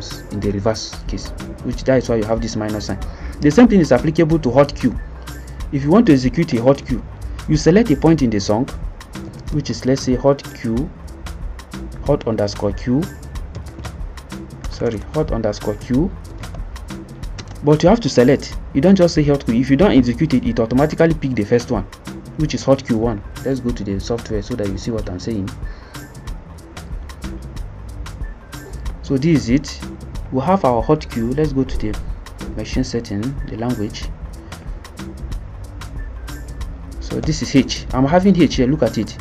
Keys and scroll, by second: 6.5 Return, 6.6 Return, 9.0-10.5 typing, 12.1-17.4 typing, 20.8 1.